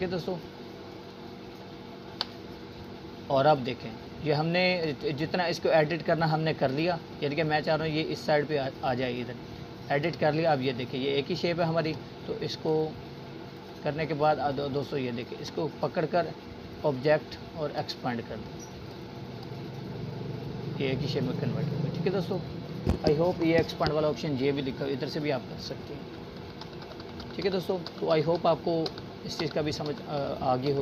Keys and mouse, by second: 1.1 click, 3.5-5.5 drag, 25.3 click, 27.1 ctrl+z.